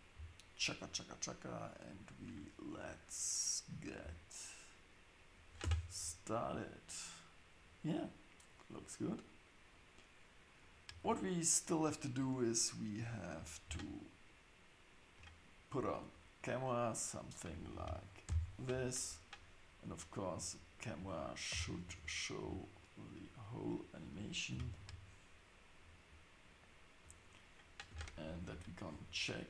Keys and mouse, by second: 5.6 space, 13.4 click, 19.9 click, 20.7 click, 21.5 g, 27.9 space, 28.5 shift+Left.